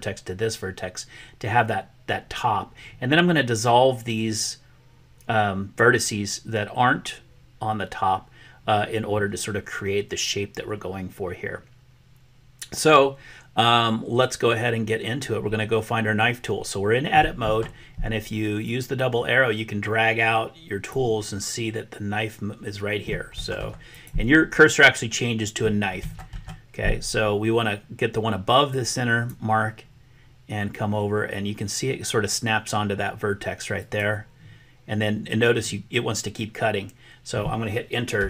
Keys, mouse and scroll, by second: 18.6-21.0 drag, 23.9 click, 28.6-38.2 drag.